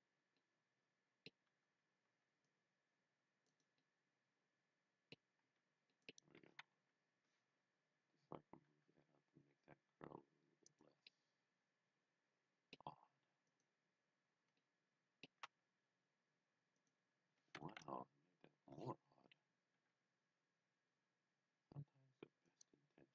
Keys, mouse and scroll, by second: 0.4 middle click, 2.1 c, 2.5 click, 3.4 right click, 3.9 middle click, 5.5 c, 5.9 middle click, 6.0 right click, 6.7 KP_3, 8.7 g, 10.7 click, 11.0 middle click, 13.5 click, 14.6 middle click, 15.5 a, 16.8 click, 17.7 KP_1, 19.6 g, 22.4 click.